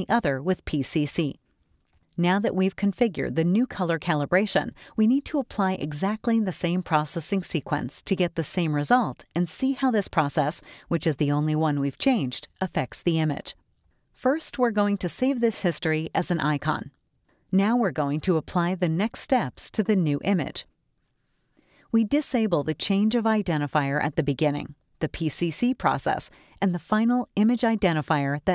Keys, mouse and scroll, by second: 1.9 right click, 2.8 click, 4.1 click, 13.9-17.4 drag, 19.1 click, 24.6 click, 27.0 click.